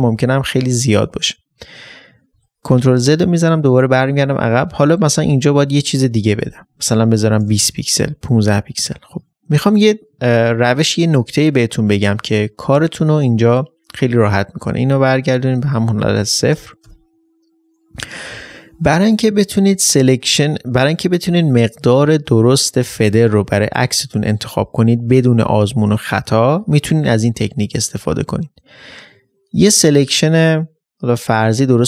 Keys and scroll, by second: 1.5 ctrl+d, 12.2 ctrl+d.